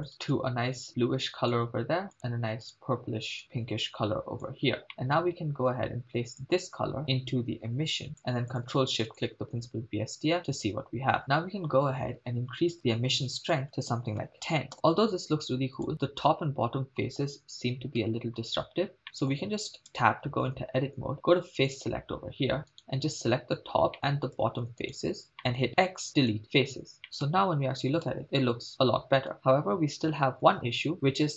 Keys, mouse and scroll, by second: 0.1 click, 2.1 click, 2.7 click, 4.9 middle click, 5.5-6.4 scroll down 2, 6.4 click, 7.0-8.2 drag, 8.6 click, 9.3 ctrl+shift+click, 13.4-14.7 drag, 14.7 shift+space, 15.9 shift+space, 18.0 KP_0, 19.0 middle click, 20.3 Tab, 21.6 click, 22.9 right click, 23.9 middle click, 25.0 shift+click, 25.0 shift+right click, 25.4 middle click, 25.8 x, 27.0 middle click, 27.2 KP_0, 28.1 shift+space, 29.3 shift+space, 30.6 Tab, 30.7 shift+space, 30.9 shift+space.